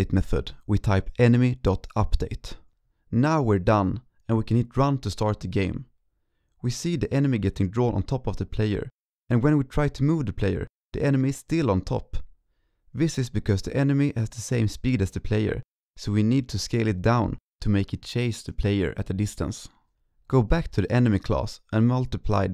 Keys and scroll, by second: 0.5 ctrl+shift+Left, 0.7 ctrl+Right, 2.7 ctrl+s.